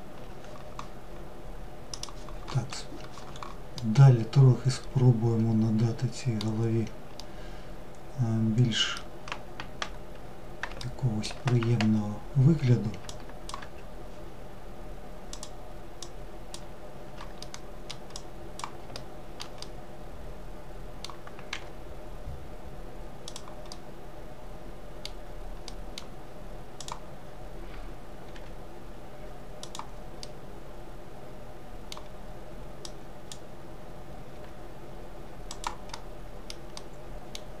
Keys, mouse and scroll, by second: 2.7-5.7 middle drag, 6.1-9.1 middle drag, 9.7 alt+middle click, 12.0 ctrl+click, 14.2 click, 16.3-17.0 middle drag, 17.0 click, 17.8 alt+middle click, 18.5-20.4 middle drag, 20.4 g, 22.6-25.6 middle drag, 25.6 click, 27.3 g, 29.1-31.7 middle drag, 31.7 click, 34.8-36.9 middle drag, 36.9 click.